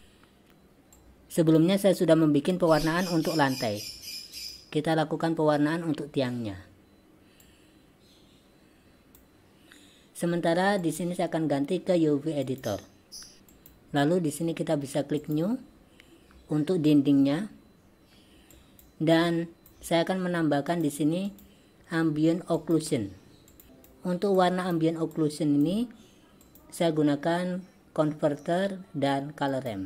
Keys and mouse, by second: 1.0-1.6 drag, 4.5 click, 7.6-9.3 drag, 10.8-12.6 drag, 13.4 v, 13.4 n, 13.7 click, 15.2 click, 18.6 drag, 19.2-19.8 drag, 20.8-24.0 drag, 24.5-24.8 drag, 25.4 click, 26.5-29.8 drag.